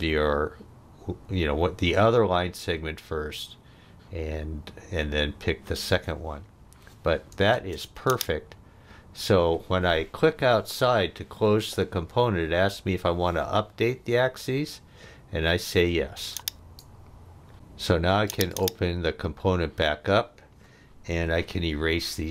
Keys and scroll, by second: 7.5 space, 17.5 space, 21.2 e.